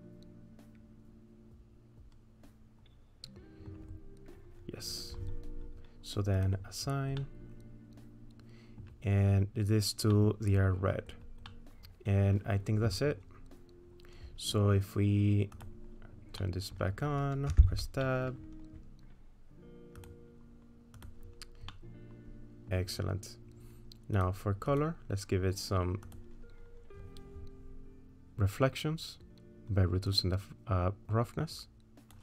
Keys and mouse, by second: 7.2-8.8 middle drag, 10.1 middle click, 11.5 middle click, 12.1 middle click, 15.6 click, 16.4 middle click, 17.5 Tab, 18.0 middle click, 20.0 click, 21.1 click, 21.7 middle click, 22.4 middle click, 24.1 click, 24.7 click, 26.1 click, 30.2-32.2 drag.